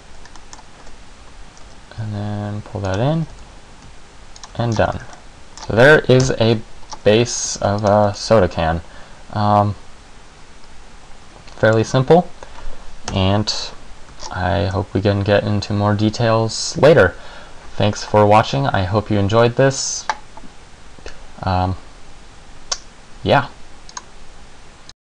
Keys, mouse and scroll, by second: 0.5 middle click, 1.0 e, 1.8 s, 3.1 click, 3.3 e, 4.6 click, 4.6 Tab, 4.8 scroll down 4, 5.0 z, 5.3 middle click, 5.7-6.2 scroll down 1, 6.3 KP_1, 7.0 scroll down 2, 7.7 ctrl+s, 8.3 middle click, 13.2 KP_1, 14.4-14.9 shift+scroll down 4, 14.9 shift+scroll down 1.